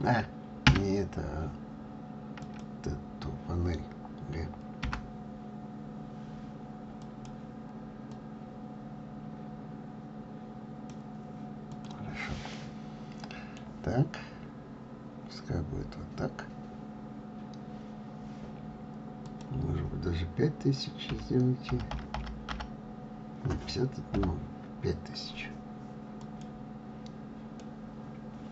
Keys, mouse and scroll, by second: 2.8 click, 5.0 g, 8.6 click, 12.0 click, 12.6-14.0 middle drag, 14.0-16.5 scroll up 14, 16.9-17.2 scroll down 2, 27.9-28.5 middle drag.